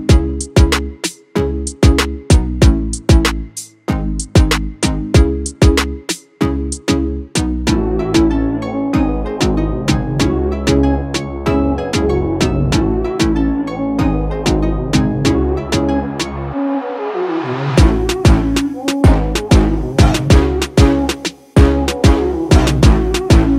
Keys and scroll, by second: 6.9 ctrl+s, 8.8 ctrl+-, 11.7 ctrl+-, 14.7 space, 16.7 space, 19.1 ctrl+-, 19.2 ctrl+-.